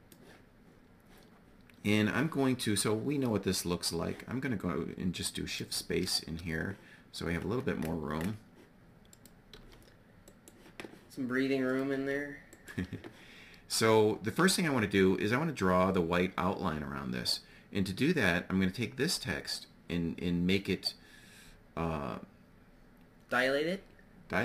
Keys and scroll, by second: 5.2 shift+space, 9.5 g.